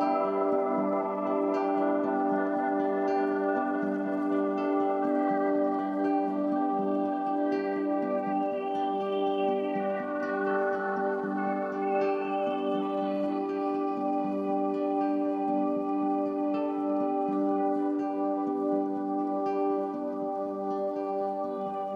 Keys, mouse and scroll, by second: 0.7 ctrl+a, 1.3-2.3 typing, 3.6 Tab, 6.3 Tab, 7.0-8.2 typing, 9.5 Tab, 9.9-10.7 typing, 11.4 shift+click, 11.9-12.6 typing, 13.2 click, 14.1 Tab, 14.3-16.3 typing, 17.4 typing, 18.5-21.9 drag.